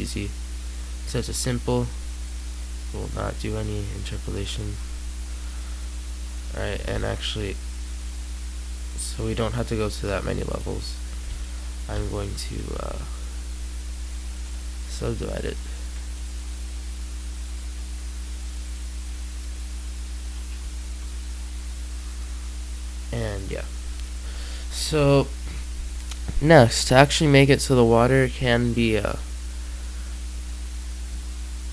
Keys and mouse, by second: 6.6 Tab, 7.5 middle click, 11.1 Tab, 11.8 Tab, 12.2-14.3 middle drag, 12.6 w, 19.0 Tab, 20.4 z, 20.8 Tab, 21.9 Tab, 26.4-28.2 middle drag, 30.5 middle click, 31.1 middle click.